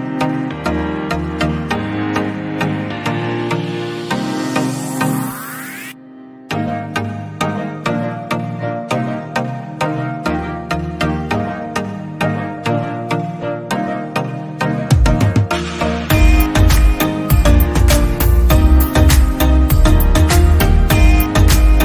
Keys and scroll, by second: 0.0-1.0 typing, 10.5 ctrl+g, 15.9 ctrl+z, 17.8 Left, 18.4 Left.